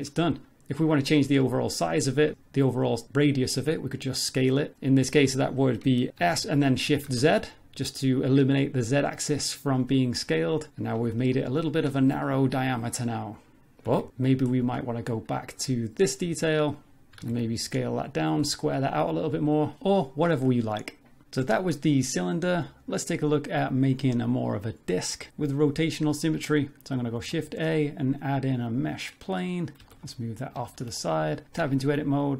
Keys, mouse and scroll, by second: 1.9 Tab, 3.0 s, 3.6 a, 6.1 s, 6.2 s, 10.7 middle click, 11.0 Tab, 11.3-11.9 scroll up 3, 12.0 shift+middle click, 12.3 middle click, 13.0 middle click, 13.9 Tab, 14.3 middle click, 16.2 z, 16.8 click, 17.1 z, 17.2 s, 19.1 Tab, 19.3 middle click, 19.7 scroll down 2, 19.8 middle click, 22.5 middle click, 23.2-24.4 scroll down 1, 24.4-25.3 scroll down 1, 27.1 shift+a, 29.8 g, 30.7 shift+middle click, 31.0 middle click, 31.4 Tab, 31.7 shift+middle click, 32.2 right click.